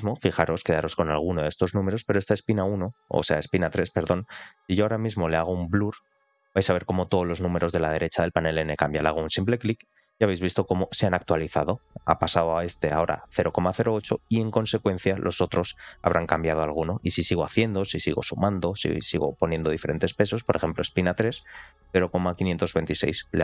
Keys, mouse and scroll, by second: 9.3 click, 17.0 click, 17.2 click, 18.0 click, 18.9 click, 23.3 click.